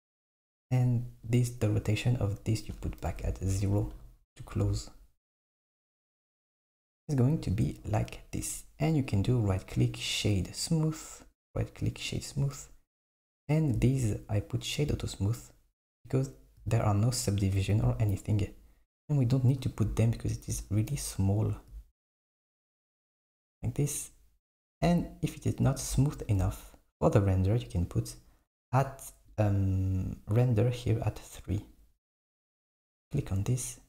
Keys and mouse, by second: 1.4 click, 2.7-4.6 drag, 9.1 click, 9.3-11.1 right drag, 11.1 click, 11.4-13.6 right drag, 13.6 click, 21.0 KP_7, 24.6 click, 29.4 click, 31.7-32.8 drag.